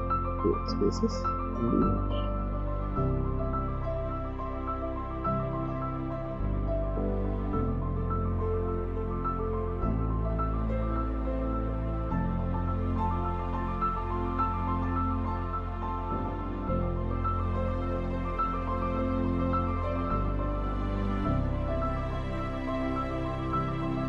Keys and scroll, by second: 3.1 Right, 3.3 Up, 3.7 Right, 6.4 ctrl+z, 9.7 shift+Up, 9.9 shift+Up, 11.7 ctrl+=, 12.2 space, 14.9 Delete, 15.2 ctrl+-, 16.4 ctrl+=, 16.7 space, 17.2 ctrl+-, 19.5 v, 19.8 space, 20.3 ctrl+-, 20.4 v, 21.6 space, 23.2 space, 23.9 space.